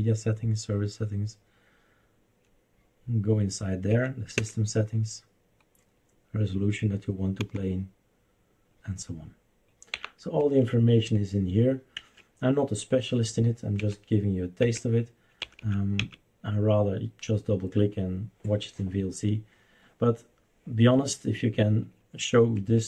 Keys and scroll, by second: 3.9 Right, 4.3 Return, 7.4 Down, 9.9 Up, 10.4 Escape, 11.9 Escape, 13.8 Right, 14.6 Right, 15.4 Left, 15.6 Left, 16.0 Left, 22.6 Escape.